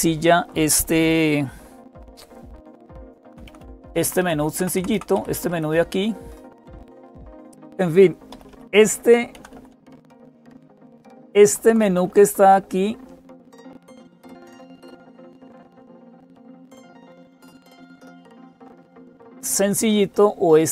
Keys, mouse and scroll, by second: 0.0-20.7 typing, 1.9 Down, 3.4 super+x, 3.8 Down, 4.0 Down, 4.4 Down, 4.6 Down, 4.6 Up, 4.7 Up, 4.9 Up, 5.1 Down, 5.1 Up, 5.3 Down, 7.1 click, 7.5 Down, 7.5 ctrl+o, 7.5 Return, 7.5 super+x, 7.5 Up, 9.1 Up, 9.5 Up, 9.7 Down, 19.0 Down, 19.6-20.0 Down, 20.0 Up.